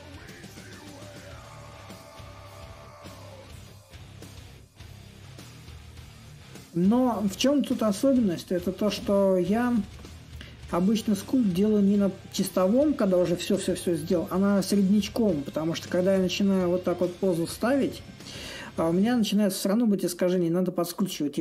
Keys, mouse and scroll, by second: 6.7-9.3 drag, 10.4-16.2 drag, 16.4-21.4 drag.